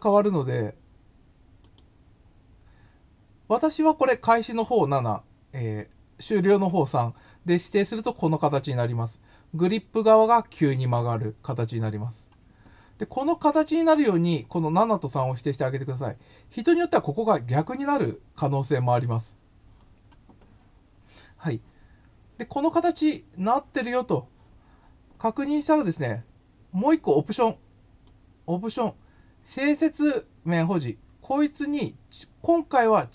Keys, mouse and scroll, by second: 1.6 click, 28.0-28.7 drag, 30.7 click, 31.7 click.